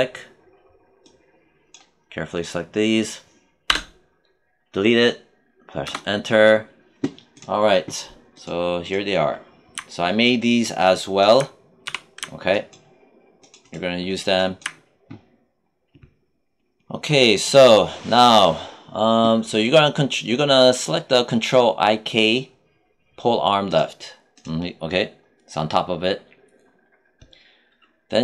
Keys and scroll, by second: 3.6 BackSpace, 5.7 Return, 11.8 w.